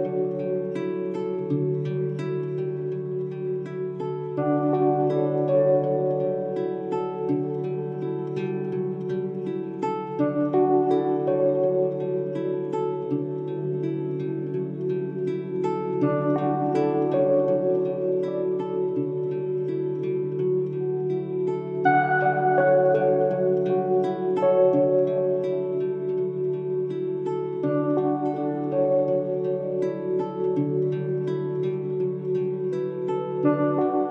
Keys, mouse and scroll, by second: 1.1 scroll down 1, 3.6-9.4 drag, 10.1 click, 13.3 click, 18.6 click, 22.1 click, 31.8 click.